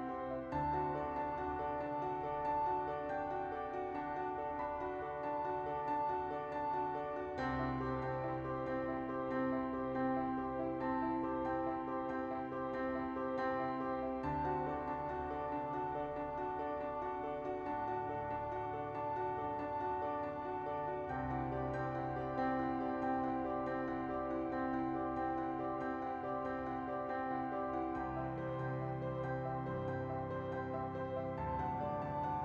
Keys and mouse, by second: 0.7 ctrl+z, 1.2 click, 1.4 click, 2.3 right click, 4.6 click, 4.9 Tab, 6.1 /, 7.3 right click, 8.9 shift+middle click, 9.6-11.6 right drag, 12.1 Tab, 12.6 a, 13.1 Tab, 13.9 ctrl+a, 14.2 Tab, 15.3 Tab, 15.3 middle click, 16.2 middle click, 16.6-17.6 drag, 18.4 click, 20.6-22.6 drag, 22.9 click, 23.9 click, 25.4 space, 26.3 space, 27.0 middle click, 28.2 middle click, 29.2 space, 30.4 space, 31.1 middle click, 32.3 shift+d, 32.3 shift+middle click.